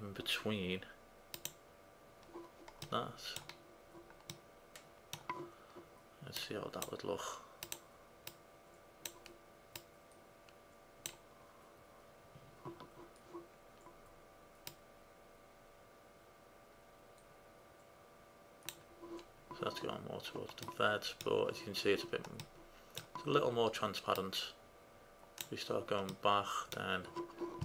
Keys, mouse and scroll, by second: 1.6-3.7 drag, 3.7-4.7 middle drag, 4.9 middle click, 6.0 middle click, 6.8-11.7 drag, 14.8-19.8 drag, 20.7-22.2 middle drag, 22.5-24.2 middle drag, 24.2 click, 25.1-26.2 middle drag, 26.3 middle drag.